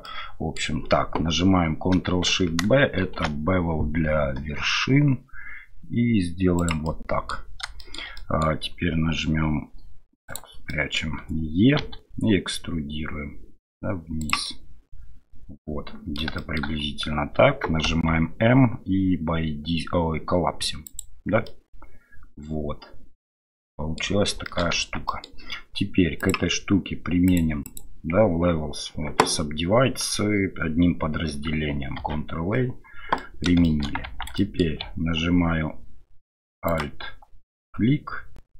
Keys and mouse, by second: 0.0 middle click, 3.0 ctrl+shift+b, 7.0 click, 7.8 shift+click, 8.2 click, 10.3 click, 10.7 middle click, 14.5-16.2 middle drag, 16.4 shift+middle click, 17.8 m, 21.5-24.0 middle drag, 24.5 shift+middle click, 24.8 Tab, 25.1 middle drag, 27.3 click, 27.6 click, 32.0 ctrl+a, 33.2 middle click, 33.6 shift+middle drag, 34.0 Tab, 34.4 middle click, 36.7 alt+click.